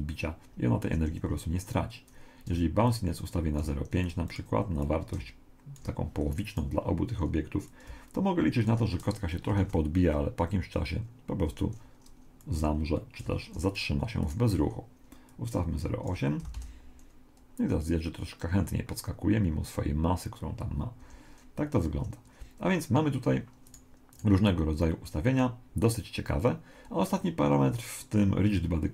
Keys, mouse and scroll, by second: 1.0 Escape, 2.9 click, 4.8 click, 6.5 right click, 7.7 click, 9.6 alt+a, 11.5 Escape, 12.4 click, 13.7 right click, 15.3 click, 16.6 alt+a, 21.0 Escape, 23.7-25.9 right drag.